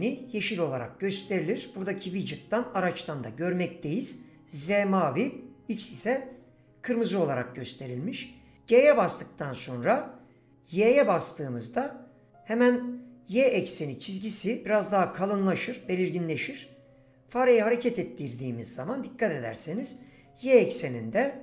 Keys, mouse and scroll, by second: 8.8 g, 10.8 y.